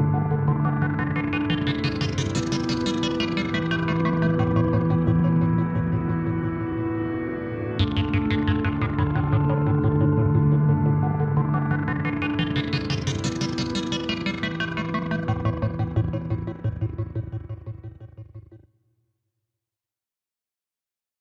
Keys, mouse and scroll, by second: 0.5 KP_0, 2.2 KP_0, 3.6 middle click, 3.6 KP_7, 4.6 right click, 6.1 right click, 6.5-8.6 drag, 8.6 right click, 8.6 KP_0, 10.2 shift+f, 12.1 click, 13.0 KP_0, 13.1 middle click, 14.3 KP_1, 14.8 middle click, 15.8 click, 18.3-21.2 middle drag.